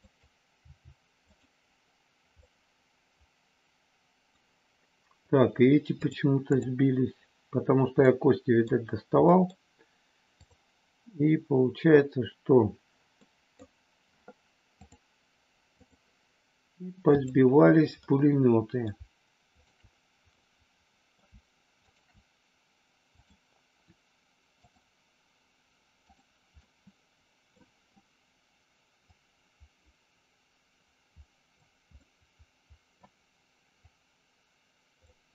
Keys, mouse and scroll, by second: 0.7 g, 1.3 click, 2.4-4.3 middle drag, 5.9 click, 8.1 middle click, 9.3 middle click, 10.3 click, 13.2 middle click, 14.9-15.9 drag, 17.1 click, 18.1 middle click, 19.5 shift+click, 20.4 middle click, 21.9 shift+click, 24.7 click, 26.1 click, 26.5-27.5 middle drag, 28.9-31.5 drag, 31.9-33.1 middle drag, 33.8-34.9 drag.